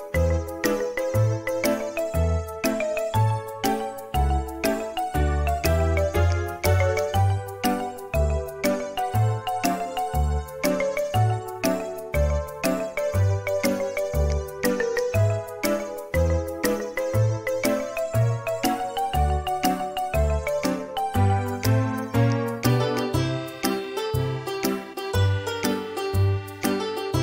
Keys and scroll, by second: 0.6-2.9 typing, 9.0 shift+Escape, 14.3 space, 16.8 Escape, 21.9 Escape.